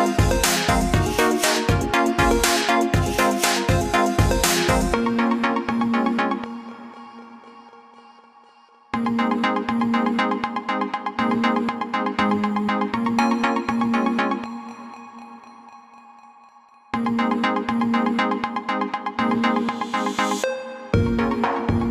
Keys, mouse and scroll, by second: 1.6 click, 6.1-6.5 scroll down 1, 7.1 scroll up 1, 8.5 scroll down 1, 9.4 scroll up 1, 11.1-11.5 scroll up 1, 16.5 click, 19.6 scroll down 1, 20.2 alt+scroll down 1, 21.8-21.9 scroll up 1.